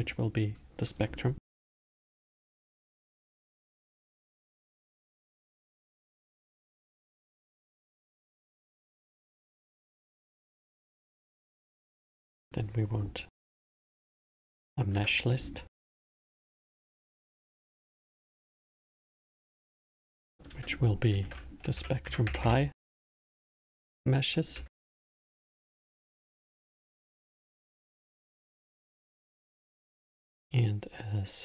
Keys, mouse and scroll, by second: 0.5-3.5 drag, 11.9-15.0 drag, 16.8-17.8 drag, 19.3 click, 19.7-22.8 drag.